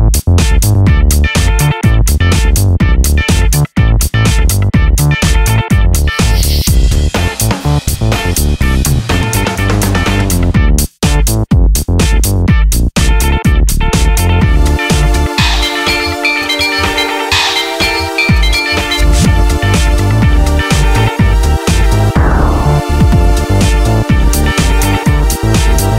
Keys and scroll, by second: 7.7 super+z.